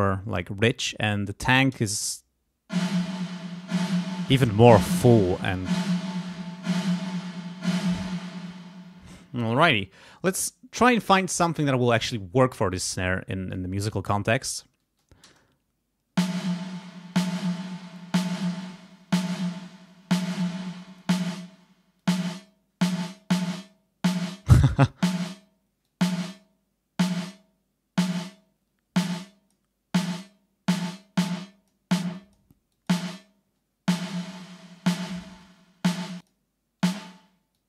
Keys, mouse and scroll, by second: 1.0 click, 1.7 space, 7.6 space, 10.1 click, 14.4 click, 15.3 space, 18.5-21.2 drag, 22.0 click, 22.8 click, 24.7 click, 25.8 click, 27.1 click, 28.3-29.7 drag, 30.7-31.9 drag, 32.1 click, 32.7 click, 34.0 click, 35.0 click, 36.2 click, 37.5 click.